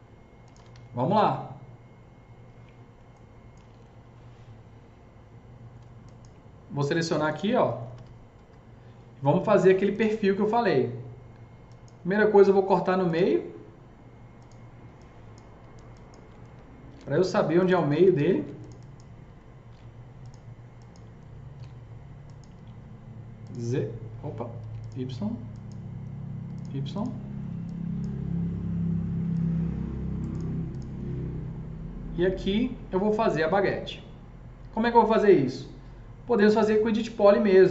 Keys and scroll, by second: 0.3-1.5 typing, 7.6 F3, 7.8 F3, 8.0 F4, 8.2 F3, 9.4 F4, 16.8 ctrl+shift+e, 17.9 ctrl+z, 18.1 ctrl+z, 18.1 ctrl+z, 19.5 ctrl+shift+e, 21.6 ctrl+shift+e, 24.5 ctrl+z, 29.2 s, 37.6 KP_0.